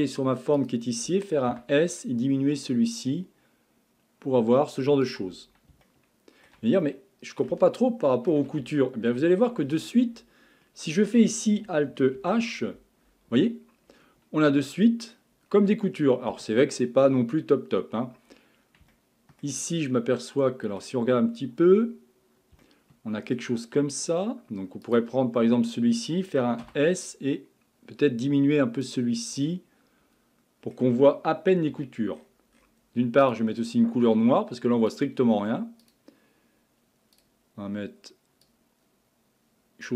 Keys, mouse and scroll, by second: 0.6 click, 1.5 s, 5.9-11.8 shift+middle drag, 12.2 alt+h, 13.3-14.5 scroll up 7, 14.5-15.5 middle drag, 15.5-16.5 scroll down 3, 16.5-17.4 shift+middle drag, 17.4-18.4 scroll up 4, 18.4-18.9 scroll up 3, 18.9-21.1 shift+middle drag, 21.1-22.6 scroll up 10, 22.6-23.6 shift+middle drag, 23.6-24.6 scroll up 4, 24.8 click, 24.9-26.6 scroll up 1, 26.6 s, 29.4-31.7 middle drag, 31.7 a, 32.1-33.2 scroll down 11, 33.2 click, 34.9 click, 35.8-37.2 drag.